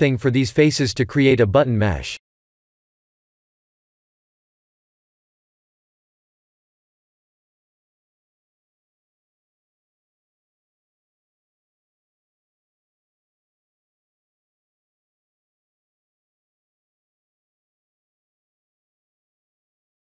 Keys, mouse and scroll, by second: 0.1 shift+d, 2.7 p, 5.8 Tab, 6.7 Tab, 7.6 p, 8.7 Tab, 9.1 click, 10.1 click, 12.6 Tab, 13.8 ctrl+z, 14.0 ctrl+z, 15.6 click, 16.6 click, 16.8 Tab, 17.5 scroll up 2, 19.7 1.